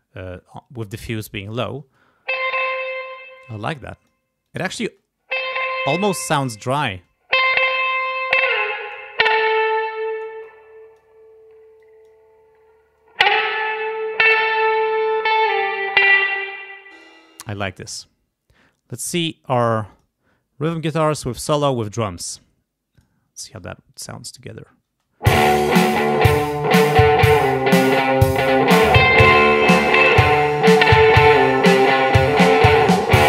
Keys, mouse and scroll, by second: 1.8 space, 3.0 space, 3.6 click, 4.4 click, 4.8 space, 5.9 space, 6.1 click, 6.9 space, 8.0-9.1 drag, 9.3-10.4 drag, 10.4 click, 11.8 click, 15.4 click, 16.3 space, 16.9 click, 19.0 click, 19.9 click, 20.6 click, 21.2 click, 21.6-22.5 scroll up 4, 22.9 click, 23.9 click, 24.3 click, 24.9 space, 25.7 scroll down 2.